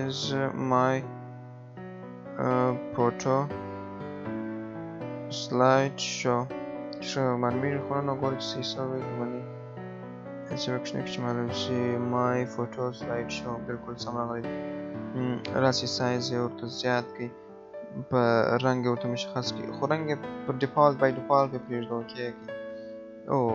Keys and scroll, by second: 2.8 BackSpace, 7.3 ctrl+a.